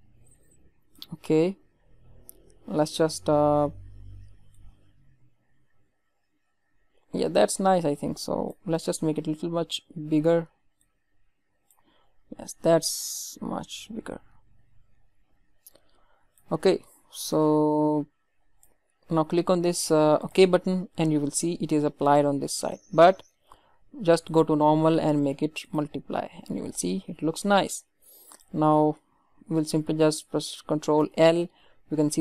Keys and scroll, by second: 30.9 ctrl+l.